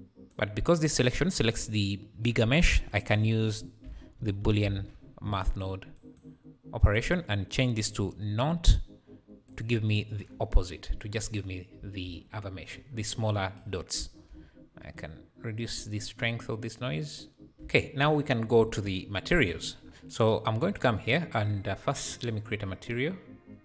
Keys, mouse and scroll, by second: 0.8-1.3 scroll up 2, 2.6 shift+a, 7.8-10.5 drag, 10.3 scroll down 2, 10.5 `, 11.8 `, 12.9-13.3 scroll up 1, 13.6-14.9 scroll up 3, 14.9-17.5 shift+drag, 17.7 `, 18.6 `, 19.8 scroll down 3, 20.9-21.9 scroll up 1, 21.9 click.